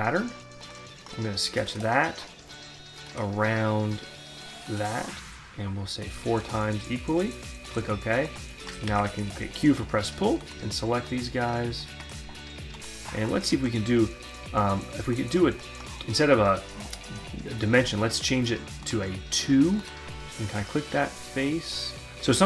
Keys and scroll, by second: 8.4 q.